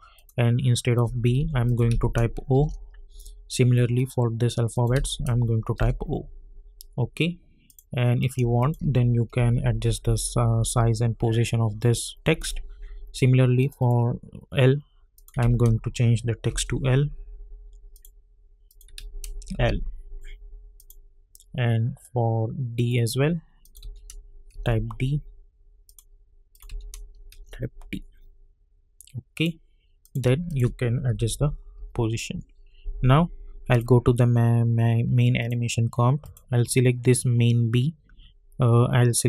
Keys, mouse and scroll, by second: 1.3 ctrl+t, 1.6 click, 1.9 ctrl+a, 2.3-3.0 typing, 3.9 click, 4.9 ctrl+a, 5.5-6.2 typing, 7.7 click, 8.6 shift+click, 9.3 Right, 12.4 click, 15.4 ctrl+a, 16.5 shift+l, 17.9 click, 18.9 ctrl+a, 19.5 shift+l, 20.7 click, 22.3 -, 22.7 click, 23.8 ctrl+a, 24.5 shift+d, 25.8 click, 26.7 ctrl+a, 27.3 shift+d, 29.3 click, 30.5 shift+click, 31.1 Right, 33.7 click.